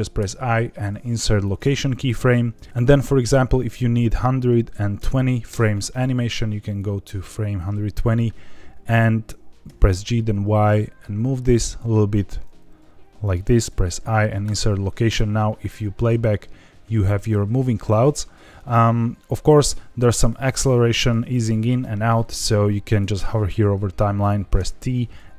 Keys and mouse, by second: 3.6-5.8 drag, 6.8 click, 9.7 g, 9.9 y, 11.6 click, 12.5 g, 12.9 y, 13.6 i, 15.1 space, 19.6 space, 24.5 t.